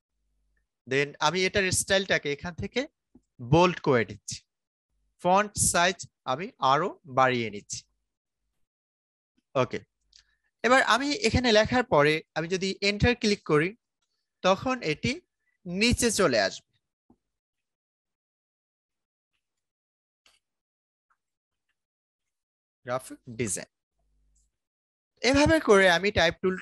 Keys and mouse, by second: 8.4-12.4 drag, 13.8 Return, 17.2-22.6 typing, 24.7-26.6 drag.